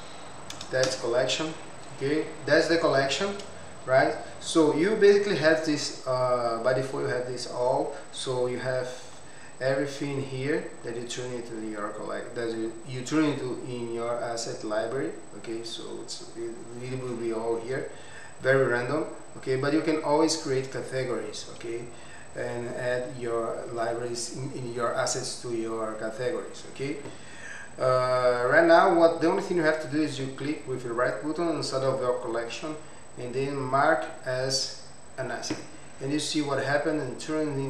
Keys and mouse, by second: 0.8 Return, 2.7 click, 4.5-5.2 drag, 6.2 click, 14.3 click, 15.7 click, 21.4 click, 28.1 click, 30.4-37.6 right drag.